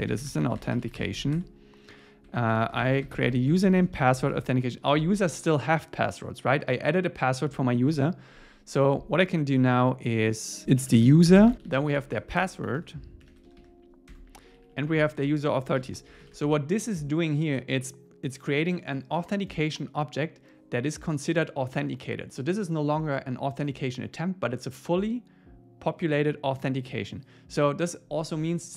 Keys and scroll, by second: 4.3 Tab, 10.6 Escape, 10.8 Right, 11.4 alt+shift+Right, 14.1 Tab, 14.6 Right, 15.2 super+Right, 15.8 super+s, 16.2 shift+super+Left.